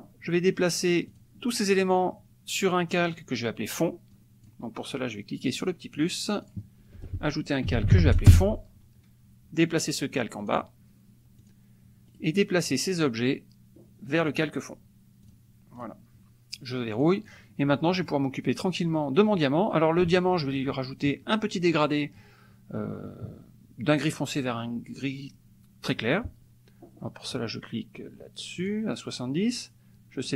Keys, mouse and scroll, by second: 1.1 click, 3.1 click, 5.6 click, 6.4 click, 7.4-8.4 typing, 10.5 click, 11.5 click, 12.1 right click, 14.3 click, 15.2 click, 15.7 click, 16.9 click, 17.9 click, 18.5 click, 19.3 click, 21.2 middle click, 28.7 click.